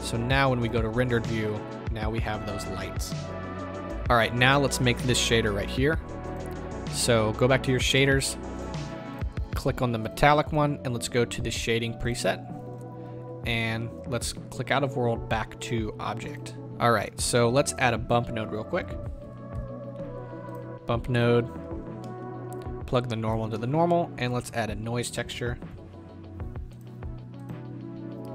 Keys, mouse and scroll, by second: 0.9-3.8 drag, 3.8 z, 9.4 click, 10.0-12.2 drag, 23.4 click, 23.8-28.3 middle drag.